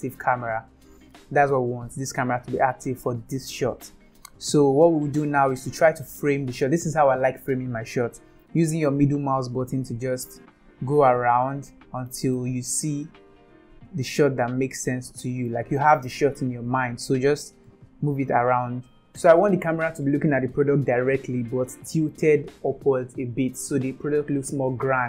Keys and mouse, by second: 4.2-5.2 middle drag, 8.9-12.1 middle drag, 12.4-15.4 middle drag, 17.7-19.0 middle drag.